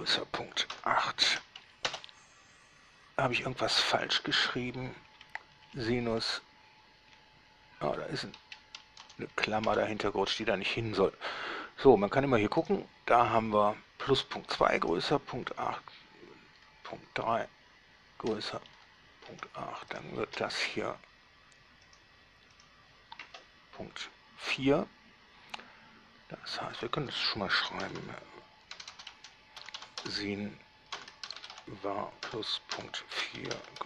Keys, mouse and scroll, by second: 1.0 8, 1.5 shift+9, 2.1 Return, 3.6 click, 4.6 Left, 4.8 Left, 5.4 Right, 5.8 Right, 5.9 Right, 6.2 Right, 6.3 Right, 7.4 Right, 7.8 Right, 9.2 BackSpace, 9.9 Return, 12.8 right drag, 15.1 right click, 16.8-18.6 middle drag, 19.0-20.0 shift+middle drag, 20.2 shift+right drag, 22.1 drag, 22.8 click, 27.0 click, 27.8-31.8 typing, 32.9-33.8 typing.